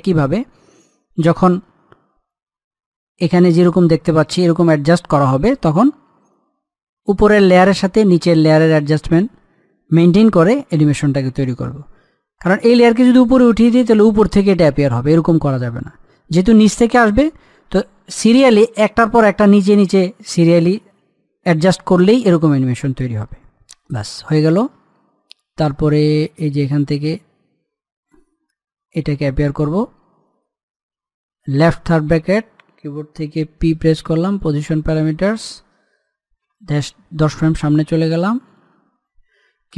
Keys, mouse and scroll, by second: 4.5 scroll down 1, 5.1 scroll up 1, 13.4 click, 23.8-29.7 drag, 32.3 i, 34.3 p, 35.2 click, 37.2 shift+Page_Down, 39.3-39.7 drag.